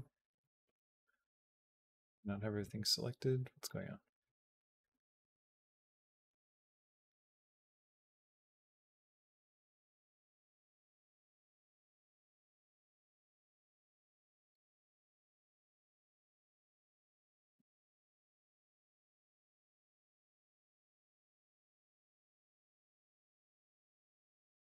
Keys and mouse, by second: 0.1 space, 0.5 space, 1.5 click, 2.0 click, 2.4 a, 3.4 click, 4.0-6.1 drag, 9.8-11.7 drag, 11.9 b, 13.6 click, 14.6-16.0 right drag, 16.4 space, 19.4 space, 19.7 click, 20.3-24.6 drag.